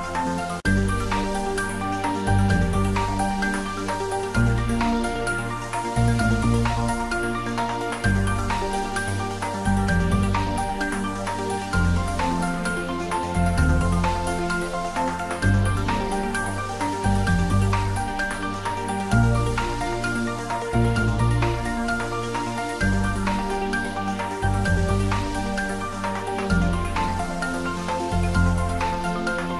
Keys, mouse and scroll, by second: 0.1 ctrl+z, 2.0 g, 2.2 x, 3.5 click, 4.1 ctrl+b, 4.6 click, 4.8 Tab, 5.4-5.7 scroll down 1, 6.4 click, 6.8-7.2 scroll up 1, 7.3 middle click, 8.0 Tab, 8.5 click, 10.2 3, 10.5 scroll down 1, 10.7 middle click, 11.6 scroll down 1, 11.8 middle click, 12.3-12.7 scroll up 1, 12.7 middle click, 13.7 3, 14.0 click, 14.4 g, 15.7 y, 16.5 click, 17.1 ctrl+b, 20.3 click, 20.5-21.3 scroll up 1, 21.3 3, 21.5 click, 23.1 s, 23.3 z, 24.2 click, 24.6 Tab, 24.9 scroll down 1, 25.2-26.5 middle drag, 26.5 scroll down 1, 26.8 middle click, 27.5 scroll down 1, 27.8 middle drag, 28.1-29.5 scroll up 2.